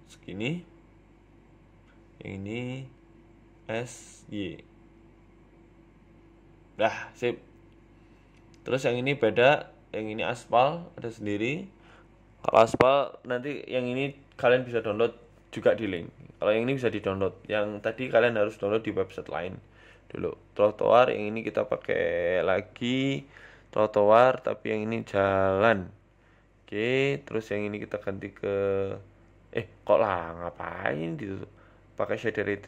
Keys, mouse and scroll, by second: 26.6 click, 27.3 middle click.